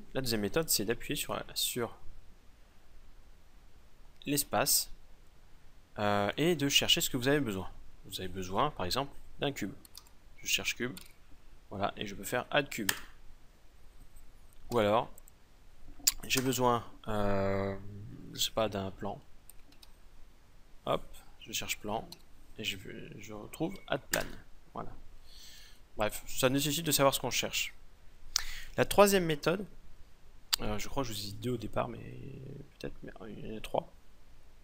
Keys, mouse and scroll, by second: 2.5 a, 3.8 space, 14.7 x, 16.4 space, 25.6 x.